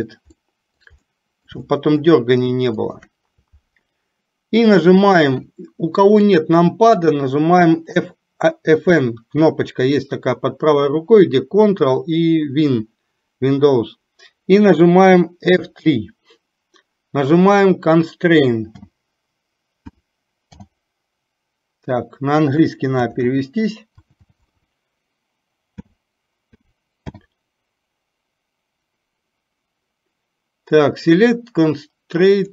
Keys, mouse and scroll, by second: 0.4 middle click, 1.1 middle click, 1.6 shift+middle click, 24.3 BackSpace.